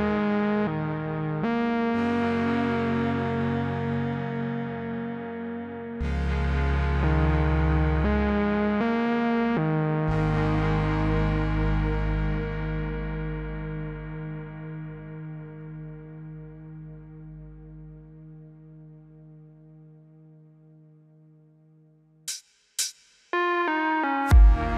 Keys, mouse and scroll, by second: 1.1 click, 8.2-9.1 click, 10.7-11.6 click, 13.8 u, 14.5-16.6 click, 18.8-19.6 click, 22.4-23.2 click, 24.0 F9.